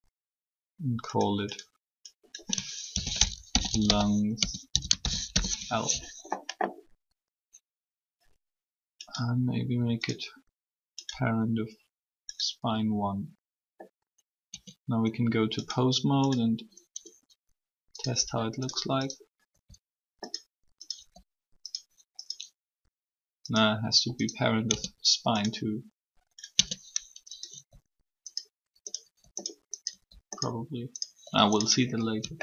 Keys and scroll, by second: 2.8-4.9 typing, 5.3 Return, 14.4 Tab, 18.1 r, 24.7 Tab, 26.5 Tab, 27.5 r.